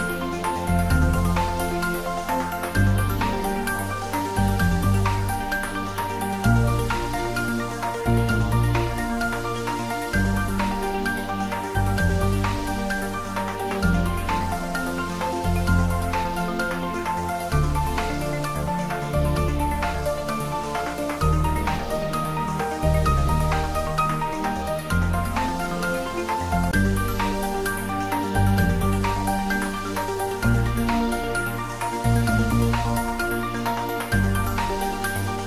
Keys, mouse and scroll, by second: 5.9 click, 7.5 click, 12.8 `, 13.3 3, 17.7 3, 17.9 click, 18.2-22.1 right drag, 22.1 3, 22.7 Return, 25.6 click, 29.7 3, 31.1 Return.